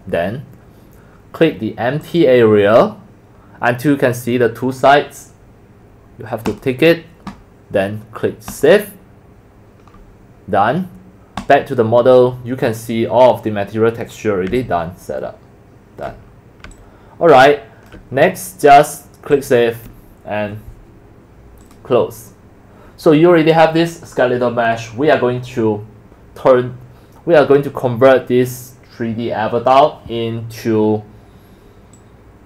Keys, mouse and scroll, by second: 2.0 click, 3.3 click, 6.5 click, 7.4 scroll up 1, 8.5 click, 11.4 right click, 12.1-13.1 middle drag, 13.2 middle click, 14.6-16.1 alt+drag, 16.7 alt+click, 17.4 alt+click, 18.1 alt+right drag, 19.4 alt+click, 19.8 alt+click, 20.0 alt+click, 21.6 click, 21.9 click, 31.9 click.